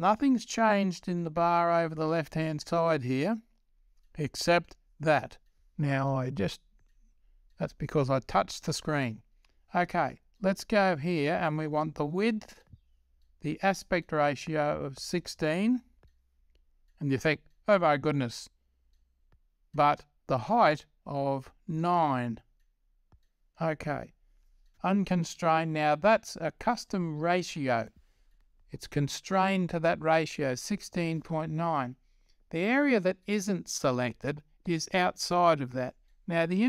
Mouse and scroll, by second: 23.1-25.5 drag.